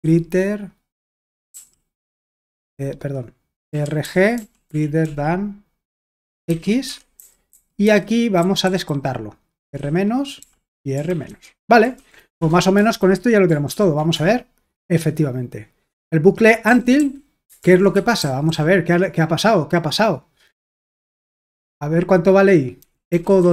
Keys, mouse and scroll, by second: 0.0 typing, 1.5 typing, 3.5-13.7 typing, 6.9 Escape, 14.1 Return, 16.7-18.5 typing, 17.6 super+l, 21.5 typing, 22.6-23.5 typing.